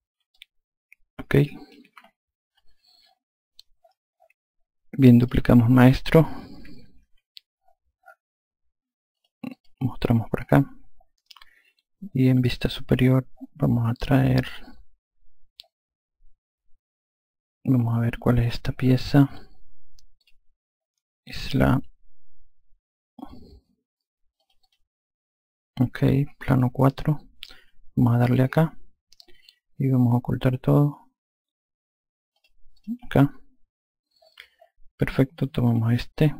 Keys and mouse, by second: 0.2 alt+click, 5.2 click, 7.0 ctrl+v, 9.1 click, 12.3 F2, 20.2 click, 24.3 click, 26.5 click, 28.4 click, 32.3 click, 35.7 click.